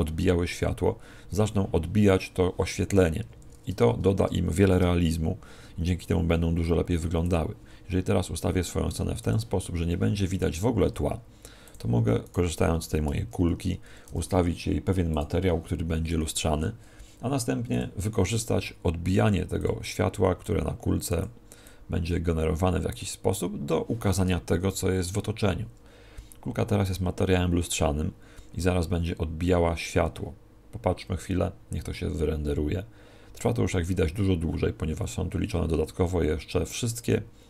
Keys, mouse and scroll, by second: 3.1 Escape, 4.6 shift+f, 7.3 click, 7.5 g, 9.3 click, 10.5 right click, 10.8 s, 11.7 click, 12.2 right click, 13.7 ctrl+2, 14.0 t, 15.9 t, 17.7-23.5 click.